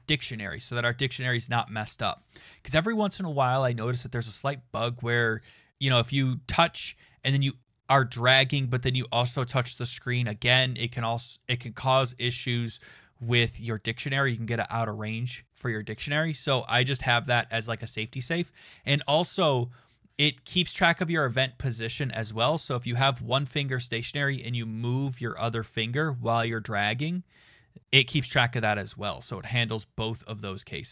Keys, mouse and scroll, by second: 17.5 Return.